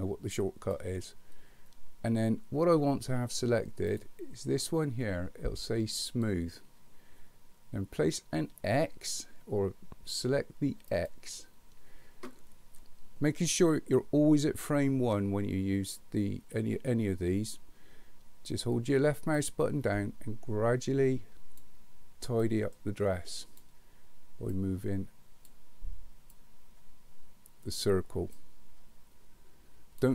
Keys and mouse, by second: 6.2 click, 10.9 click, 19.4-21.6 drag, 22.5-23.7 drag, 24.6 click, 26.4-27.8 drag, 28.4-30.0 drag.